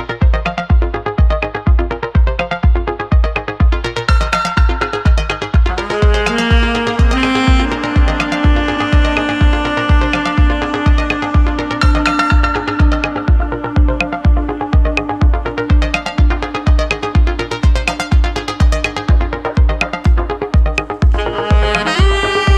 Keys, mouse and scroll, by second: 0.1-2.6 drag, 3.2 ctrl+z, 3.8 click, 4.8 click, 6.0-7.2 drag, 7.5 ctrl+z, 8.8 click, 9.4-11.4 drag, 11.7 ctrl+z, 12.1-13.5 drag, 15.0-16.1 drag, 16.3 ctrl+z, 17.4 click, 18.5 ctrl+z, 19.6-20.8 drag, 21.0 ctrl+z, 21.2-21.7 drag, 22.1 click.